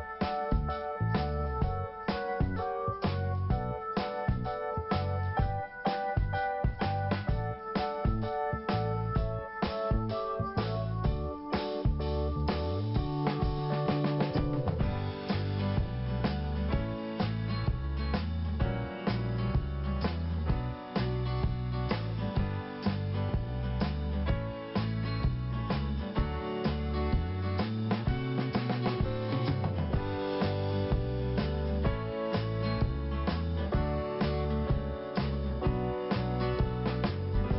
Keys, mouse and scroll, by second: 2.3 scroll up 1, 2.9 scroll up 1, 3.0 click, 5.1 click, 6.8 scroll up 1, 8.3 click, 9.9 click, 13.7 click, 15.0 click, 16.8 click, 18.6 scroll down 1, 19.9 click, 21.3 scroll up 1, 22.2 click, 27.0 scroll up 1, 27.7 click, 29.6 click, 31.6 scroll down 1, 33.1 scroll up 1, 34.4 scroll down 2, 35.6 scroll up 1.